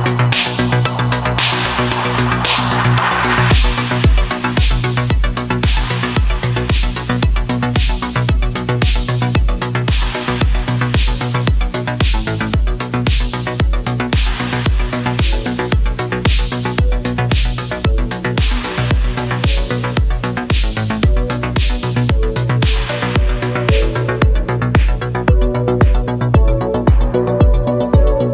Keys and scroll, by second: 8.3 ctrl+z, 8.7 ctrl+z, 14.8 ctrl+z, 15.1 ctrl+z, 16.3 ctrl+z, 17.2 ctrl+z, 18.4 ctrl+z, 18.7 ctrl+z, 19.1 ctrl+z, 19.6 ctrl+z, 21.5 ctrl+z, 24.0 ctrl+z, 25.7 ctrl+z.